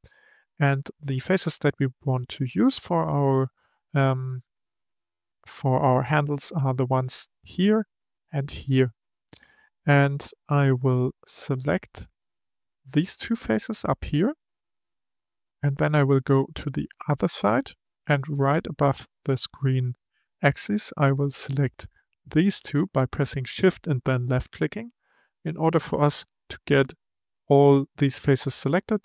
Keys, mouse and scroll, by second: 5.7-7.0 scroll up 1, 7.0 click, 7.4 click, 8.1 click, 8.6 click, 11.6 click, 12.6 shift+click, 15.0-18.0 middle drag, 21.0 shift+click, 22.4 shift+click, 25.3-28.3 middle drag.